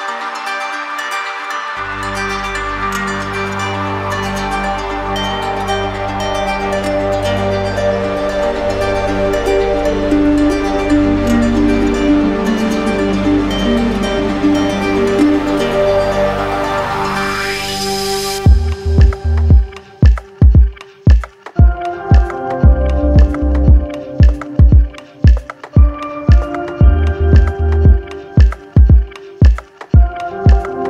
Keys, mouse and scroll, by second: 0.0 click, 1.2 click, 1.9 click, 3.1 right click, 3.8 shift+right click, 4.7 alt+right click, 7.7 right click, 8.1 shift+right click, 8.7 alt+right click, 9.2 alt+right click, 9.9 d, 10.1 d, 10.3 d, 11.2 right click, 11.8 alt+right click, 13.0 alt+right click, 14.1-15.6 right drag, 17.6-18.7 drag, 19.4 click, 19.8 right click, 20.9 click, 21.4 right click, 23.2 click, 24.0 right click, 24.8 shift+right click, 26.0 right click, 27.4-28.4 drag, 28.6 click, 29.4-30.4 right drag, 30.7 click.